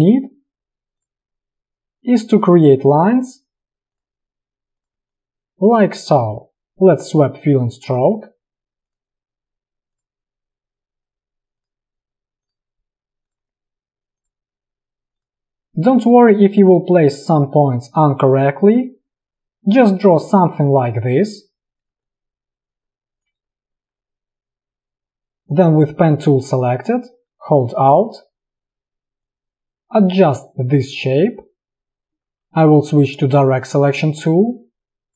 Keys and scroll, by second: 5.1 space, 22.0 space, 32.9 a.